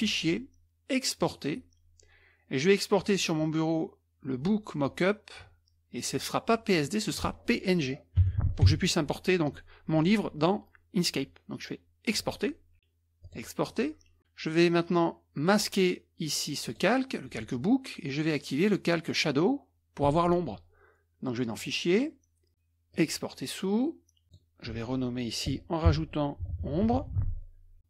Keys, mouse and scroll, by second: 0.0 click, 1.2-1.5 drag, 6.8 click, 8.2 n, 8.7 g, 12.1 click, 13.2 click, 16.6 click, 18.9 click, 21.5 click, 22.9 click, 24.2 click, 25.9-27.6 typing.